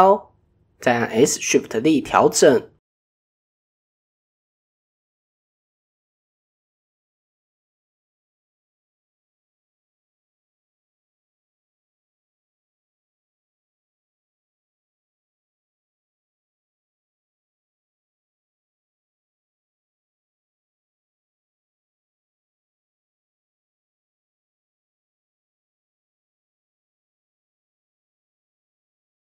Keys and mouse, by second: 0.5-0.9 middle drag, 1.9 KP_1, 2.8 KP_3, 3.6 s, 9.3 middle click, 10.0 middle click, 10.7 KP_1, 12.2 s, 15.9 click, 16.3 click, 17.3 middle click, 18.1-18.4 middle drag, 18.8 middle click, 19.6 middle click, 20.6 shift+click, 21.5 g, 22.6 middle click, 23.4 g, 24.8 g, 26.0 middle click, 26.8-28.3 middle drag, 28.5 middle click.